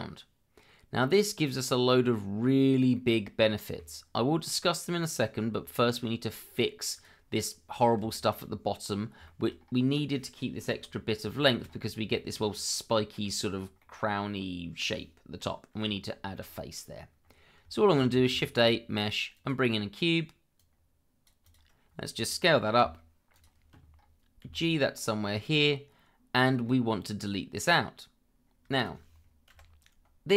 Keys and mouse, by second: 1.0-1.5 middle drag, 2.9-3.8 middle drag, 5.8 middle drag, 6.9 click, 8.1 shift+middle drag, 9.2 shift+middle drag, 11.4 shift+middle click, 12.1 shift+middle drag, 12.7-13.2 middle drag, 13.8-14.8 middle drag, 17.8 shift+middle drag, 18.3 shift+a, 22.8 s, 24.4 g, 28.7 shift+click.